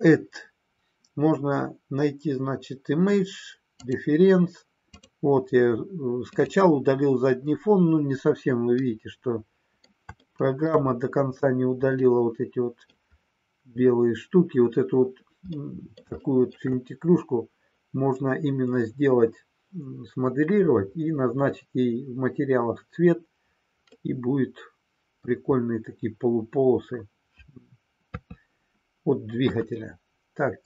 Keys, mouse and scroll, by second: 8.8-9.8 middle drag, 10.2 shift+middle click, 11.9 middle click, 15.5 middle click, 16.2 shift+middle click, 23.9-25.2 middle drag, 28.0 KP_3.